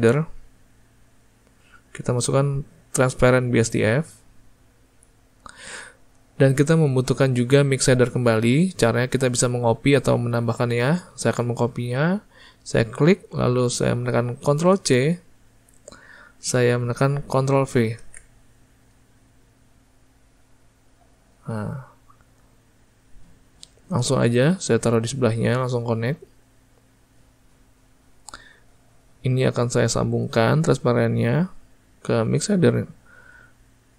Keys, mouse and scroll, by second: 13.0-18.1 drag, 18.1 ctrl+v, 20.0 click, 25.9 click, 28.9-32.8 drag.